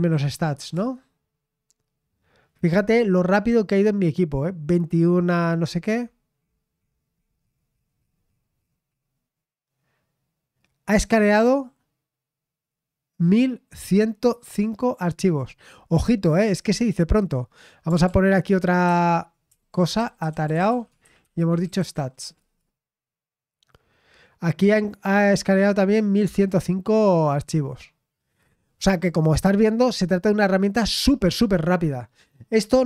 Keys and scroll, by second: 0.0-1.0 typing, 18.0 ctrl+p, 18.9 ctrl+w, 19.5 ctrl+w, 19.7-22.7 typing.